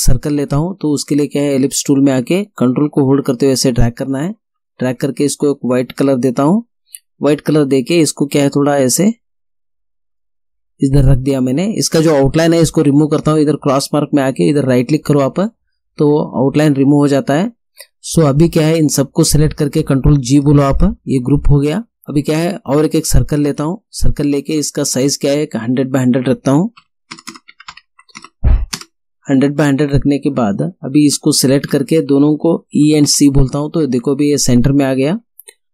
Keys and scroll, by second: 3.0 ctrl++, 20.8 ctrl+g, 26.8 1, 27.2 0, 27.5 Tab, 27.7 1, 28.0 0, 28.8 Return, 32.7 e, 33.1 c.